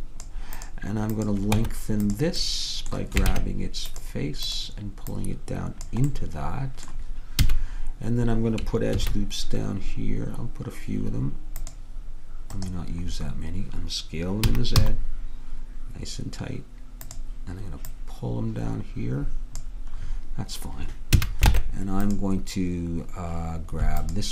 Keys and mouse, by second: 0.6 click, 1.6 Tab, 3.4 ctrl+Tab, 6.2 click, 7.5 a, 9.0 ctrl+r, 14.6 s, 18.1-20.2 drag, 20.2-21.2 middle drag, 21.2 a, 21.6 ctrl+Tab, 24.1-24.3 drag.